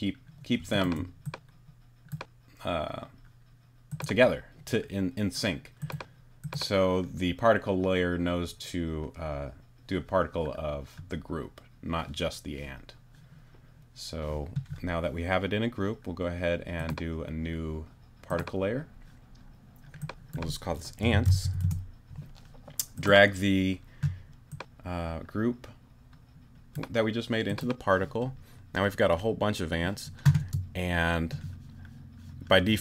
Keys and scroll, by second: 20.8-21.9 typing, 30.4 space.